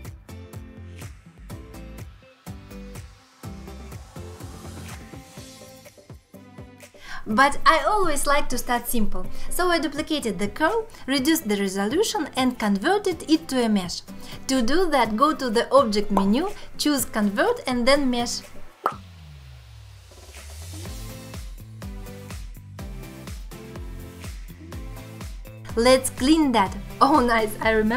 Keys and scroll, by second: 5.7 shift+d, 6.4 m, 8.1 q, 19.7 Tab, 20.1 2, 22.3 ctrl+alt+shift+n, 23.8 ctrl+z.